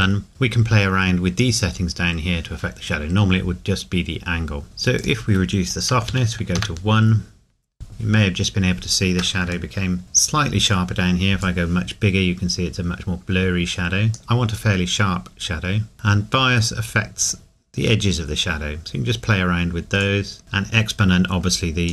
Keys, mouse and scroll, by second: 5.0 click, 6.1 KP_1, 8.0 KP_Enter, 8.2 scroll up 1, 9.7 shift+middle click, 10.6 scroll up 1, 11.4 click, 15.9 click, 20.0 click.